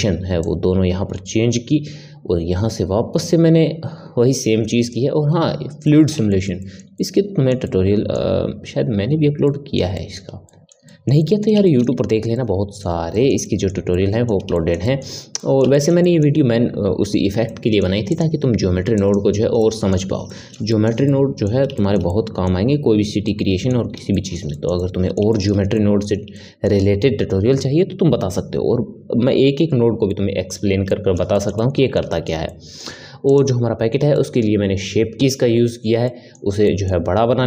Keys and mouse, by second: 0.4-3.5 drag, 5.8-18.1 middle drag, 18.1 click, 18.9 click, 19.6-29.5 middle drag, 30.0-33.2 middle drag, 33.2 click, 34.1-37.4 middle drag.